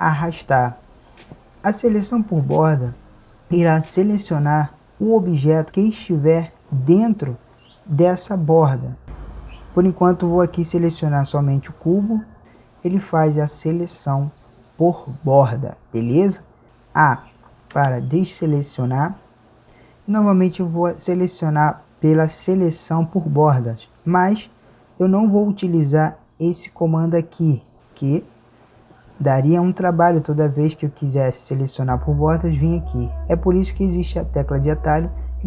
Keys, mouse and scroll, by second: 17.7 a, 24.3-26.3 drag.